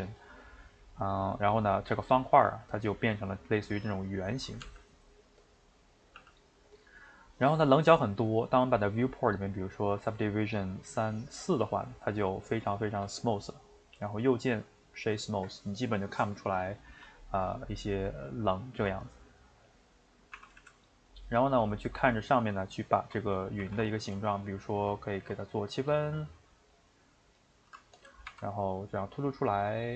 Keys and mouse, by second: 1.8-4.6 middle drag, 4.6 g, 5.6-6.2 middle drag, 6.2 g, 7.6-9.8 middle drag, 9.8-12.0 drag, 12.0-14.7 shift+middle drag, 14.7-17.2 right drag, 17.2-19.0 middle drag, 19.0 Tab, 19.4 middle click, 20.4 r, 21.3-23.6 middle drag, 23.6 ctrl+r, 27.7 Tab, 27.9 click, 28.3 e, 29.5 shift+middle click.